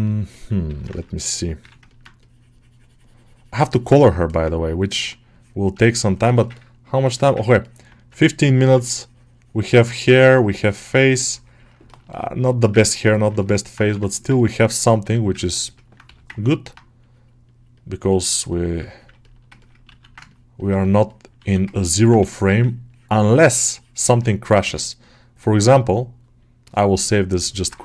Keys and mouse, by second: 0.2 middle click, 0.5 g, 0.8 ctrl+alt+middle click, 1.0 middle click, 1.3 middle click, 1.4 3, 1.7 middle click, 4.1 middle click, 6.1 shift+middle click, 6.4 ctrl+middle click, 6.7 middle click, 7.0 shift+middle click, 7.3-8.3 ctrl+alt+middle drag, 9.4 click, 9.4 typing, 10.0-11.7 drag, 11.7 shift+middle click, 12.0 middle click, 12.7 ctrl+alt+middle click, 13.0 alt+middle click, 13.3 ctrl+middle click, 14.0 alt+middle click, 14.2 ctrl+middle click, 14.5 middle click, 15.3 ctrl+middle click, 15.6 middle click, 15.9 g, 16.2 ctrl+middle click, 16.5 alt+middle click, 16.9-18.7 drag, 18.7 ctrl+middle click, 19.1 middle click, 19.5 ctrl+middle click, 19.7 alt+q, 20.1-21.6 shift+drag, 21.6 ctrl+alt+middle click, 22.0 1, 22.4 ctrl+click, 22.7-24.2 ctrl+drag, 24.5 ctrl+s, 27.4 alt+middle click.